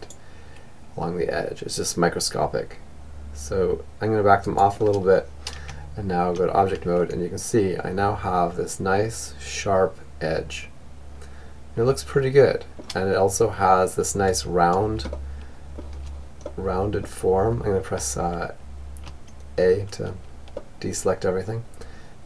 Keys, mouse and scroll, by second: 4.1 Tab, 5.4-7.3 middle drag, 11.4-16.6 middle drag, 17.4 a, 18.9-20.7 middle drag.